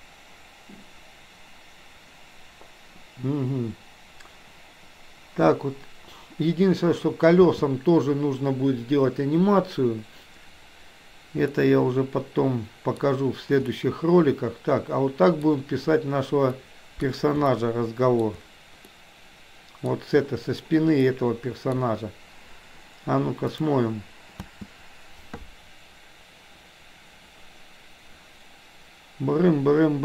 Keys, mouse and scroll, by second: 7.5 space, 11.6-13.1 middle drag, 13.7-15.5 middle drag, 16.6 middle click, 17.5 shift+middle click, 19.0-20.0 middle drag, 21.1 middle click, 23.6 click, 24.6 space.